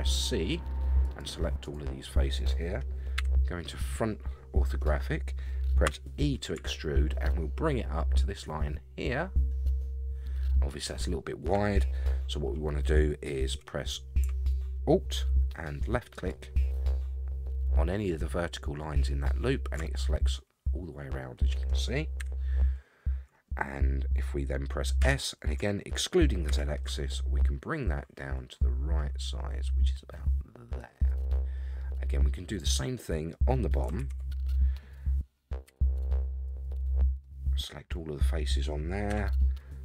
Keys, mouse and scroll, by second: 3.1 KP_1, 4.9-5.8 scroll up 1, 5.8 e, 16.1 alt+click, 19.9-21.7 middle drag, 22.2 KP_1, 25.0 s, 31.5 scroll down 1, 31.8-33.3 middle drag, 34.0 alt+a, 35.7 c, 37.2-38.6 middle drag, 39.1 KP_1.